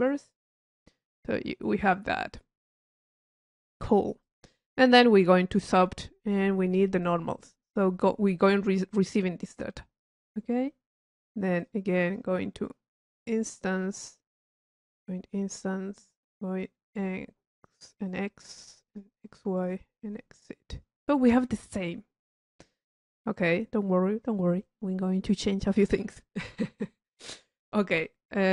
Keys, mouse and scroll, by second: 0.3-0.9 drag, 3.0 middle click, 3.6-4.4 drag, 5.1 click, 7.3 click, 7.3 click, 7.6 middle click, 10.0 click, 11.6-12.5 drag, 13.2 click, 14.4 click, 16.1 click, 16.8 click, 18.0 click, 18.9 click, 19.6 click, 20.3 click, 21.3-22.6 middle drag, 28.0-28.4 drag.